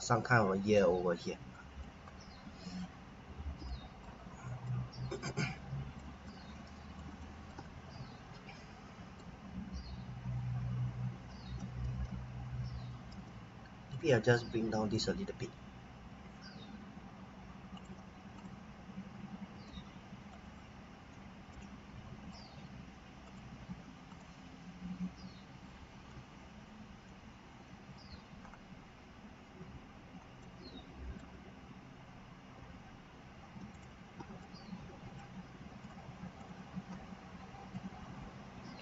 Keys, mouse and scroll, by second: 1.0-1.5 scroll up 1, 1.5 middle click, 2.0-3.5 scroll down 1, 3.7 middle click, 4.2-4.6 scroll up 1, 4.6 middle click, 6.2 scroll down 1, 6.5 middle click, 11.8 alt+a, 12.8-13.6 typing, 13.9 click, 17.7 click, 19.5 b, 20.3 click, 21.5 middle click, 23.2 click, 27.7-28.4 scroll up 1, 28.4-30.4 scroll down 1, 30.4 middle click, 33.7 click, 34.4 middle click, 35.8 click, 36.4 shift+click, 37.7 click.